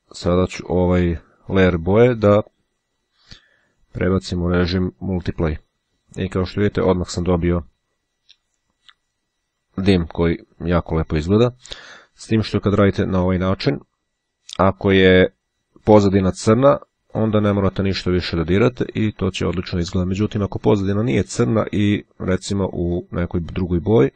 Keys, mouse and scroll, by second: 2.1 click, 4.9-6.1 drag, 20.6-21.7 drag, 21.8 click.